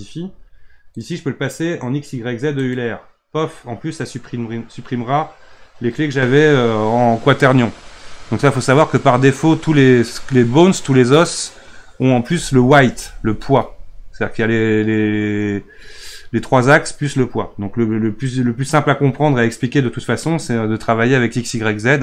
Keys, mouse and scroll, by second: 0.9-22.0 drag.